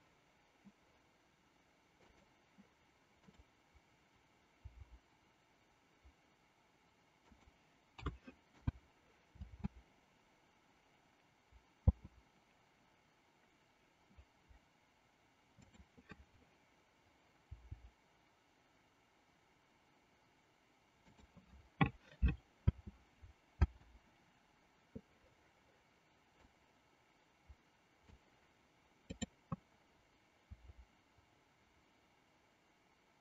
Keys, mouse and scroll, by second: 2.1 click, 4.8 r, 8.0 a, 8.6 i, 9.4 space, 15.6-16.7 drag, 17.4 g, 22.6 space, 26.4-28.2 drag, 30.7 r.